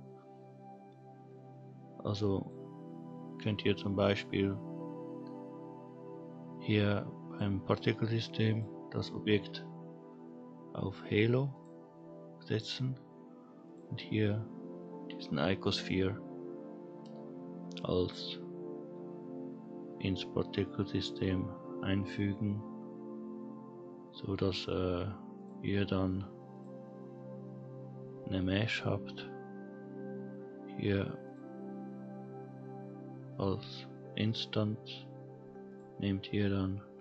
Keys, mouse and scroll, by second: 2.4 click, 4.1-4.9 scroll up 1, 4.9-5.5 scroll down 1, 7.2 click, 8.5-11.6 drag, 13.6 click, 25.3 click, 26.5-31.3 drag, 35.7 click.